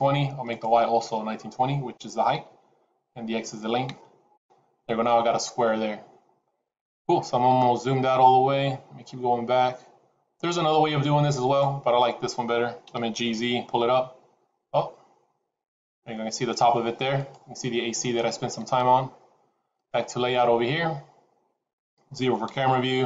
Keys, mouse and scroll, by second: 21.0 click, 22.4 KP_0.